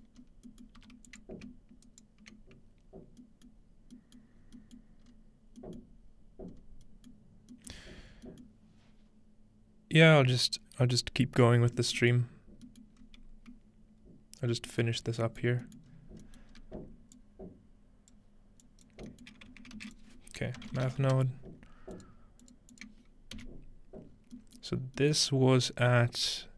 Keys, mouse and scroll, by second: 0.0-3.4 drag, 1.4-3.4 scroll up 1, 1.4 g, 3.5-5.5 middle drag, 3.6-5.5 scroll down 1, 5.5-5.9 scroll, 7.4-8.3 scroll up 2, 8.3-11.4 scroll up 1, 12.2 middle click, 12.4-13.5 scroll down 2, 13.5-15.4 middle drag, 15.4-15.9 scroll down 1, 15.8 middle click, 15.9-17.4 scroll up 4, 16.4 middle click, 17.4-21.0 drag, 19.8-21.5 typing, 23.4 typing, 24.1-25.4 scroll down 2, 25.4-26.5 middle drag, 25.4-26.3 scroll up 2.